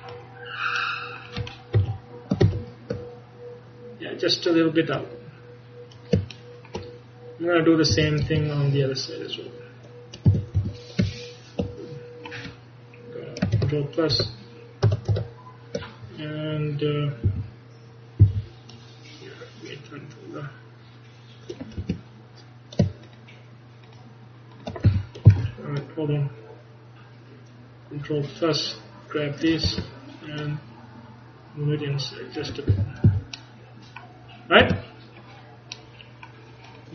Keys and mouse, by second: 1.8 KP_1, 2.5 ctrl+KP_1, 5.0 click, 6.6 click, 8.0 a, 8.3 z, 10.4 a, 10.6 a, 13.6 ctrl+KP_Add, 14.2 ctrl+KP_Add, 15.2 ctrl+KP_Add, 17.3 a, 18.3 c, 23.1-28.1 drag, 24.9 a, 25.4 c, 30.5-32.4 drag, 32.8 a, 33.1 z, 34.7 Tab.